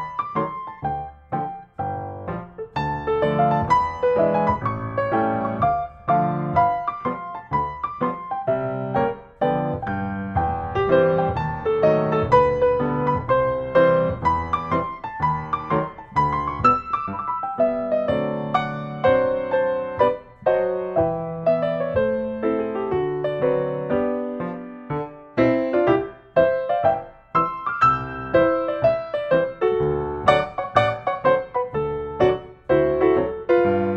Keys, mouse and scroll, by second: 0.4 scroll down 5, 0.7 scroll up 1, 0.7 scroll down 1, 1.0-1.5 scroll up 3, 1.6 scroll down 1, 2.1 scroll, 2.9 click, 4.0 right click, 5.0 click, 6.5 middle click, 7.0 s, 8.0 click, 9.4 click, 9.8 scroll, 10.0 scroll down 3, 10.4 scroll, 11.1 click, 13.1-13.5 scroll, 15.6-16.7 drag, 19.6-20.7 drag, 20.9-22.0 drag, 23.5-24.6 drag, 25.6-26.7 drag, 27.5-28.6 drag, 31.4-32.4 drag, 32.6-33.8 drag.